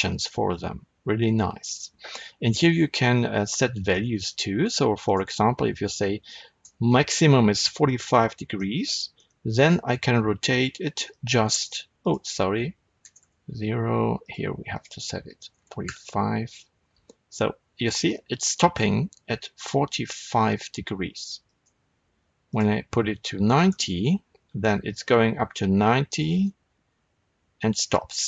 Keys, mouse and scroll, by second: 1.7 right click, 3.9-4.9 middle drag, 4.9-8.0 drag, 6.6 KP_Enter, 8.0 middle click, 9.1-11.1 middle drag, 9.1 r, 11.1 right click, 11.9-14.2 drag, 13.2 KP_Enter, 14.6-21.5 drag, 15.8 KP_Enter, 16.7 r, 21.5 right click, 22.4-28.2 drag, 23.7 KP_Enter, 24.4 r.